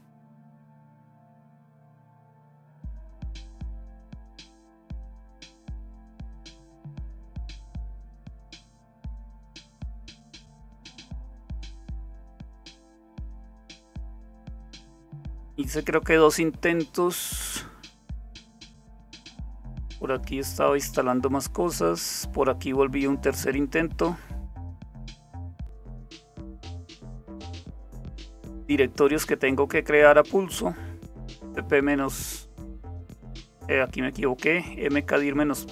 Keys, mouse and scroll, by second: 0.7-1.8 scroll down 1, 5.1-5.6 scroll down 1, 5.9-6.4 scroll down 1, 6.4-8.6 scroll down 1, 8.6-9.2 scroll down 1, 9.2-9.8 scroll down 1, 9.8-12.2 scroll down 1, 12.2-13.5 scroll down 1, 13.5-14.8 scroll down 2, 14.8-15.6 scroll down 1, 15.6-16.3 scroll down 1, 20.3-21.0 scroll down 1, 21.0-23.5 scroll down 1, 23.5-24.1 scroll down 1, 24.1-25.2 scroll down 1, 25.3-26.3 scroll down 2, 26.3-27.3 scroll down 1, 27.3-27.9 scroll up 2, 27.9-35.7 scroll up 1.